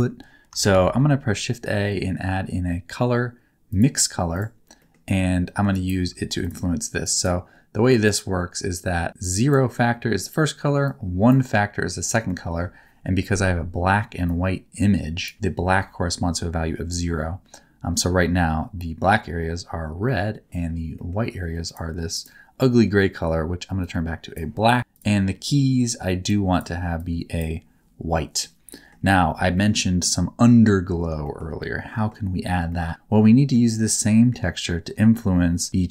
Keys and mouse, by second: 0.7 shift+a, 4.8 middle click, 5.7 ctrl+right click, 9.3 click, 10.9 click, 12.3 middle click, 14.2-15.2 drag, 21.0 middle click, 22.1 click, 28.2 middle click, 28.7 middle click, 29.5 middle click, 31.2 shift+middle click, 31.5 middle click, 32.7 middle click, 34.1 middle click.